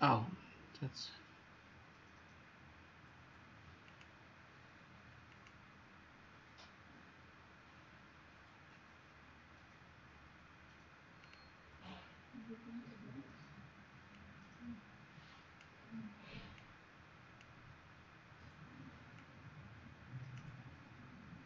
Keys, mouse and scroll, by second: 5.2 click.